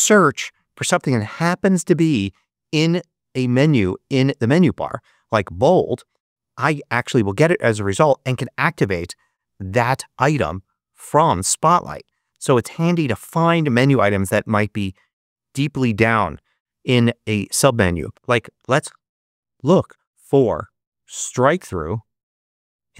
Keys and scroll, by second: 0.0-0.4 typing, 8.4 Return, 20.4 super+space, 21.1-22.4 typing.